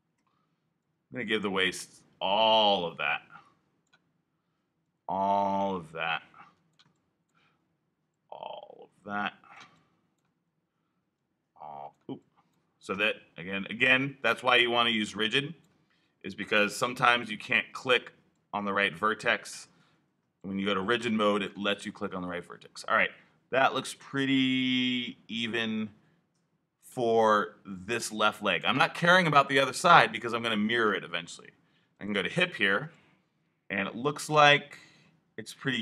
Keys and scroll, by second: 0.0 alt+3, 12.8 i, 17.1 3, 19.6 l.